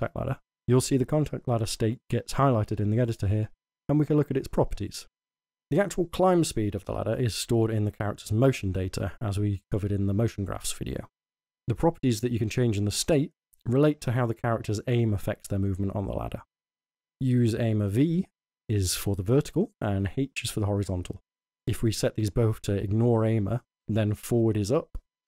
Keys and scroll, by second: 23.4 w, 24.6-25.2 typing.